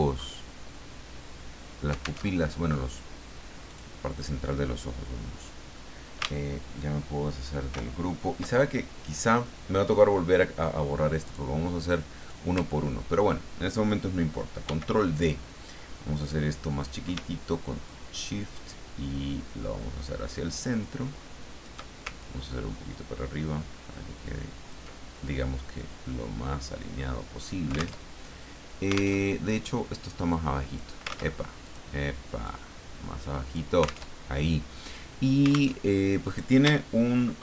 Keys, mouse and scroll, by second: 2.2 alt+Tab, 3.7 click, 7.7 ctrl+shift+g, 11.3 click, 12.2 click, 12.7-13.1 ctrl+scroll up 2, 14.6 ctrl+d, 17.9-22.0 shift+drag, 22.2-24.9 ctrl+shift+drag, 25.8-27.6 drag, 28.0 alt+Tab, 29.2 alt+Tab, 30.3 click, 31.1 ctrl+z, 31.6 ctrl+click, 32.4-34.0 drag, 34.1 alt+Tab, 35.7 alt+Tab.